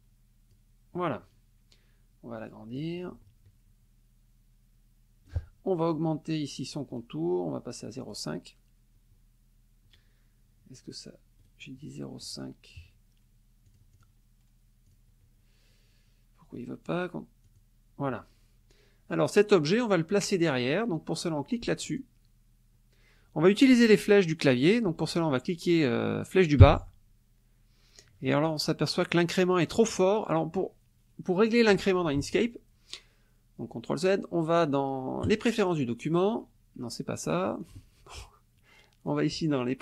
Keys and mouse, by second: 2.8-5.5 drag, 6.9 click, 8.0 click, 11.4 right click, 12.2 click, 13.7 click, 14.9 click, 16.5 right click, 17.4 click, 21.8 click, 26.6 Down, 32.2 ctrl+z, 35.2 click, 37.6 click.